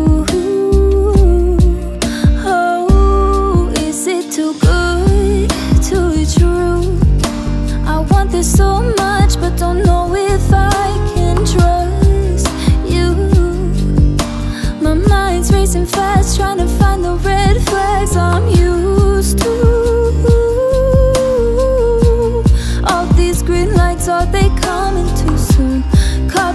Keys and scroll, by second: 4.2 ctrl+-, 4.4 ctrl+-.